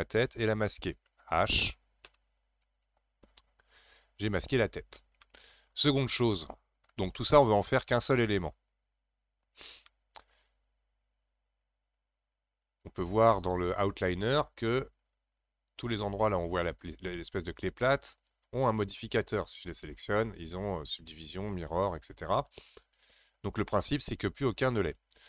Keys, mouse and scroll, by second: 2.0 h, 4.6 scroll down 3, 5.2-8.9 shift+middle drag, 9.9-12.9 middle drag, 19.0 click.